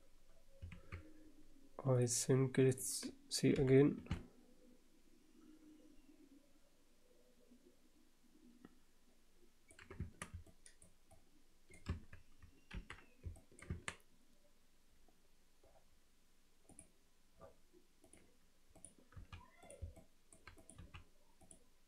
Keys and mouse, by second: 0.7 alt+a, 3.5 h, 4.1-9.7 alt+middle drag, 10.0 Tab, 10.5-10.8 alt+middle drag, 11.1-11.7 alt+middle drag, 12.3 Tab, 12.7 alt+h, 13.4 alt+middle click, 13.7 Tab, 16.7-18.7 drag, 19.7 x, 19.9 alt+middle click, 20.7 click, 20.8 x.